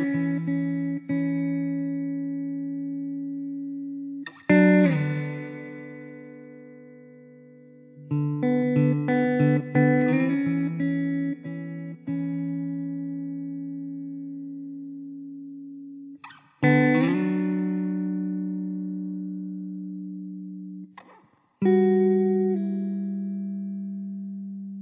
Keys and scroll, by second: 0.6 shift+a, 9.5 shift+z, 9.6 shift+z, 17.3 KP_0, 21.8 shift+a, 23.2 s.